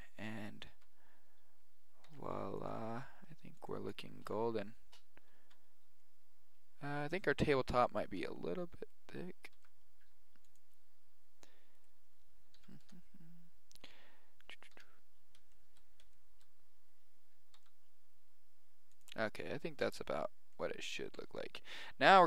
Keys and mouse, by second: 0.7 z, 2.0 g, 2.9 s, 4.2 Tab, 5.1 middle click, 5.4 z, 6.3 middle click, 7.0 click, 7.0 right click, 7.7-8.9 right drag, 8.2 s, 9.5 s, 11.7 right click, 12.5 KP_1, 12.8 KP_0, 13.8-15.5 drag, 13.8-15.5 right drag, 14.7 KP_1, 17.5 g, 19.3-22.2 middle drag.